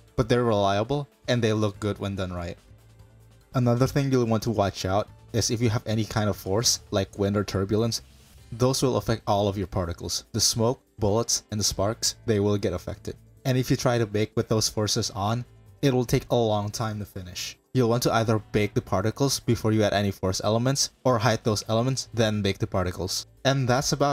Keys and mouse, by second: 3.4 click, 3.7-4.0 drag, 4.5 KP_Decimal, 5.7 middle click, 11.6-12.6 middle drag, 12.9-14.0 middle drag, 16.0 middle click, 16.5 drag, 17.9 KP_Decimal, 19.0 click, 19.8 click, 20.2 KP_Decimal, 20.8 click, 21.3 shift+click, 22.1 click, 22.6 shift+middle click.